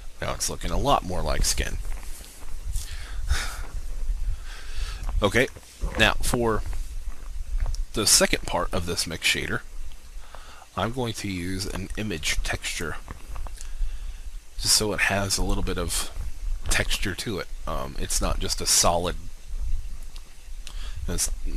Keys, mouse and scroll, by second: 5.3 shift+a, 12.7 click, 16.3 click.